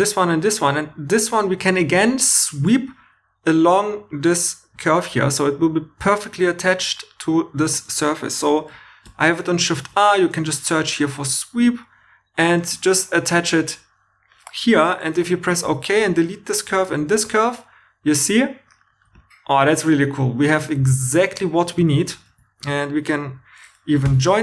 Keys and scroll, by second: 9.0-9.9 typing, 15.6 2, 16.1 x, 16.9 shift+e, 21.8 shift+e, 24.0 j.